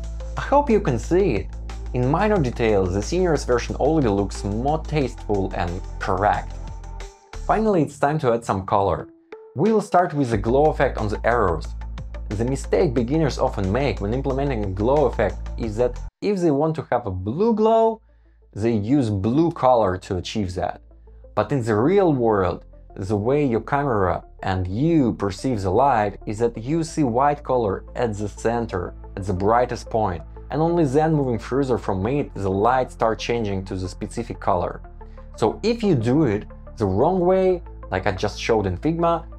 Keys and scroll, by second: 9.1 Return, 10.1 Down, 12.1 shift+Up, 13.8 Escape, 14.1 super+z, 14.5 super+c, 14.6 super+v, 15.7 Escape, 18.1 shift+Down, 18.7 Up, 21.6 Escape, 22.3 Escape, 28.4 shift+Up, 28.7 shift+Down, 30.1 Escape, 33.4 Down, 35.1 super+c, 35.4 super+g, 36.2 Return, 37.6 shift+Up, 38.7 Down.